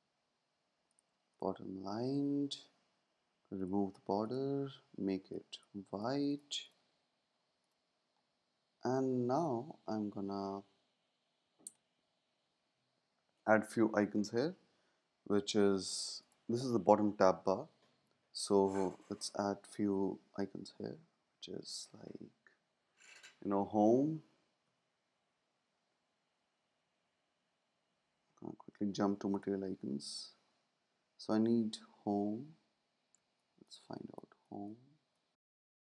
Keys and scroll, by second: 24.6 super+`, 33.1 space.